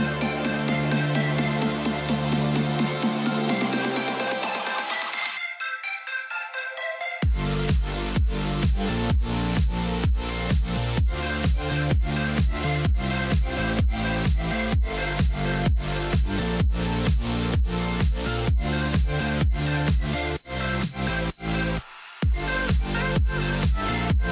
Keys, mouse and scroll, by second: 14.4 right click.